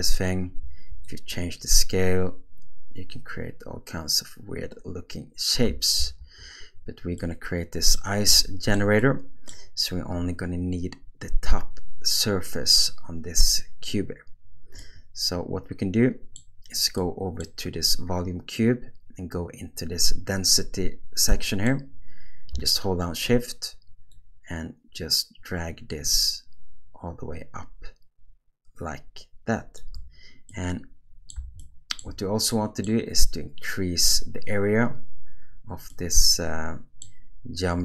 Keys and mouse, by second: 1.0-5.6 drag, 6.0 ctrl+z, 7.2 middle click, 8.4-8.7 shift+middle drag, 9.1 middle click, 15.0-16.4 middle drag, 17.0 middle click, 21.4 middle click, 24.2-29.9 shift+drag, 30.5-31.3 middle drag, 31.6-32.0 shift+middle drag, 32.5 middle click, 35.9-37.0 middle drag.